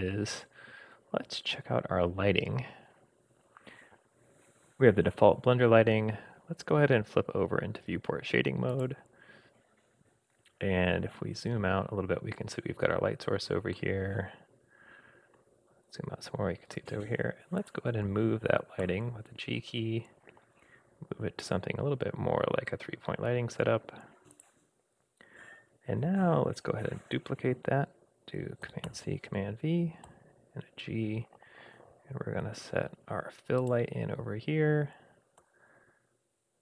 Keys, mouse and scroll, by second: 8.7 click, 10.4-10.8 scroll up 3, 10.9-11.7 scroll down 4, 13.7-16.0 middle drag, 15.5-16.0 scroll down 2, 17.6 click, 18.8 g, 28.9 super+c, 28.9 super+v, 30.0 g, 35.4 g.